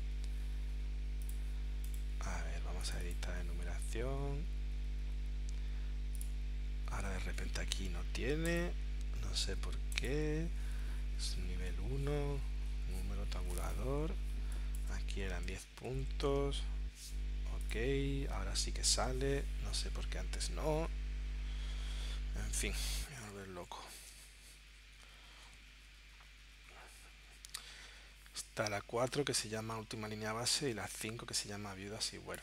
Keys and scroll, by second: 15.3 1.